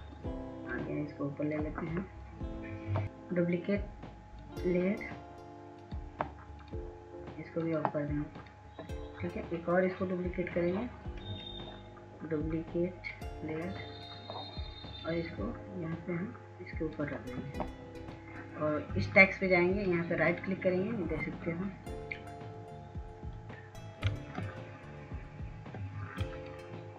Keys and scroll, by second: 25.9 ctrl+s, 26.3 ctrl+s.